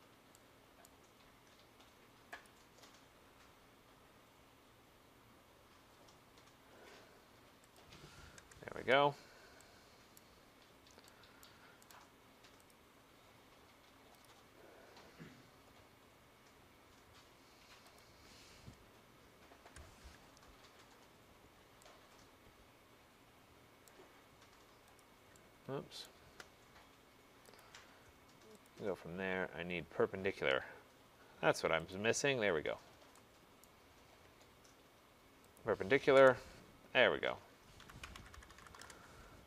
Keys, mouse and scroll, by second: 0.9 right click, 2.5 click, 7.8 click, 8.5 Return, 10.3 right click, 10.5 middle click, 11.5 right click, 11.5 middle click, 12.0 right click, 12.8 click, 14.3 click, 16.0 middle click, 16.5 middle click, 16.5 middle click, 18.0 click, 19.7 Return, 21.0 middle click, 21.6 middle click, 21.6 middle click, 22.0 middle click, 23.9 right click, 25.1 click, 26.1 right click, 27.7 click, 28.7 click, 32.0 click, 33.7 right click, 34.3 middle click, 34.4 middle click, 35.6 click, 35.6 middle click, 36.2 Return, 37.9-38.9 typing.